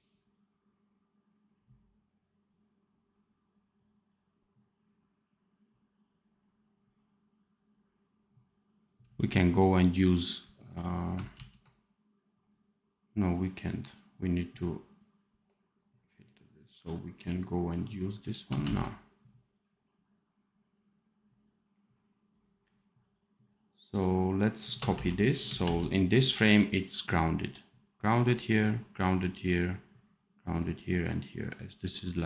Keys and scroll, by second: 11.2 ctrl+z, 18.5 ctrl+z, 24.8 ctrl+c, 25.5 ctrl+v.